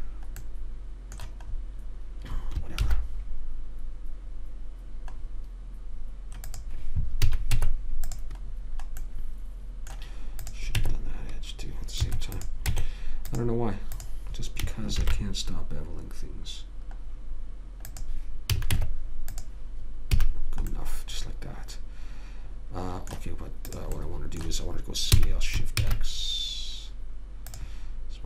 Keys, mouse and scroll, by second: 3.2 ctrl+b, 7.5 a, 7.9 Tab, 8.9-10.0 middle drag, 10.8 click, 11.1 Tab, 13.0 Tab, 15.3 ctrl+b, 18.9 a, 19.1 Tab, 20.5 a, 24.1 click, 25.5 s.